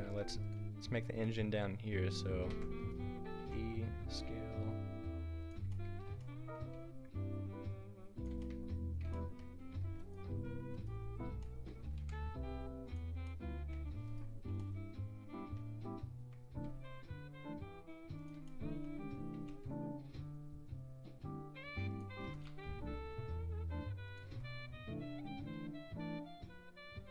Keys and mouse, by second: 0.1 Tab, 2.6 e, 3.4 s, 6.7 e, 9.8 Tab, 10.0 click, 10.3 Tab, 10.6-12.0 drag, 12.0 Delete, 14.1-15.1 drag, 16.7 s, 19.3 s, 22.2 e, 22.5 s, 24.3 e.